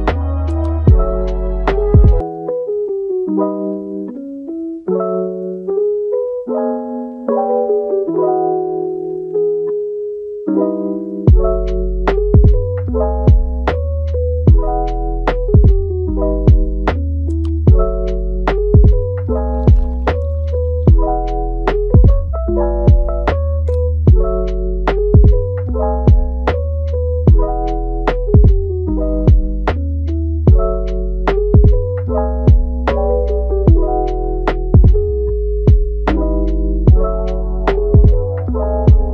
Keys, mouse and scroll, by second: 0.0 click, 0.5 click, 0.8 g, 2.6 click, 2.8 g, 4.6 scroll down 1, 4.8-5.5 middle drag, 5.5 click, 5.9 g, 7.3 Tab, 7.7 click, 8.9 alt+s, 10.4 middle click, 11.1 e, 12.7 alt+s, 14.5 click, 14.9 alt+s, 16.2 click, 16.8 click, 17.2 alt+s, 18.2 Tab, 18.4 click, 19.4 click, 19.9 Tab, 20.1 click, 20.6-21.0 middle drag, 21.0 g, 22.2-23.0 middle drag, 23.0 g, 24.7 alt+s, 27.3 w, 27.9 right click, 28.5 w, 29.3 w, 30.2 w, 30.6 e, 32.1 middle click, 32.7 g, 34.0 scroll down 4, 34.3 middle click, 34.7 scroll up 2, 35.0 middle click, 35.4-36.2 scroll up 3, 36.2 Tab, 36.6 click, 38.3 alt+s.